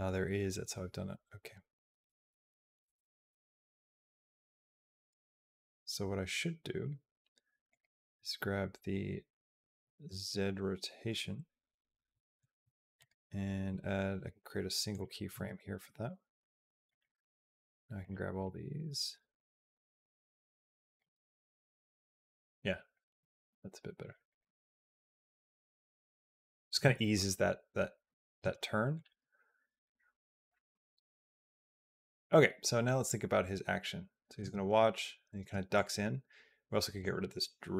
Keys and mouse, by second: 7.5 click, 12.8-14.8 right drag, 16.7 click, 17.0 g, 18.3-20.8 drag, 20.9 space, 22.2 space, 22.7 click, 23.3 g, 24.1 click, 24.2 space, 25.5 click, 26.5 space, 27.9 space, 28.3 space, 28.8 click, 29.0 space, 30.6 space, 32.1-34.3 drag, 34.2 space, 35.2 space, 35.6-36.9 drag.